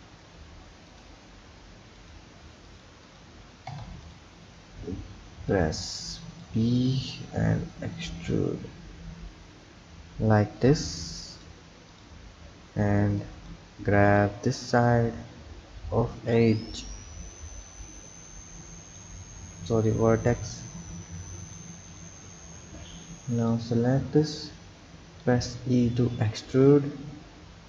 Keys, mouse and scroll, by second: 2.0 click, 2.6 click, 3.0 click, 3.7 Tab, 4.0 click, 4.9 b, 7.7 e, 11.9 click, 12.8 b, 14.2 click, 17.6 click, 19.9 click, 21.9 click, 22.7 b, 25.2 e.